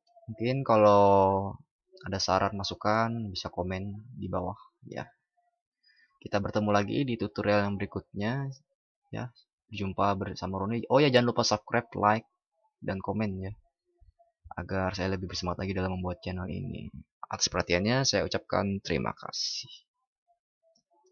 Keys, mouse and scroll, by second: 20.8 ctrl+shift+?.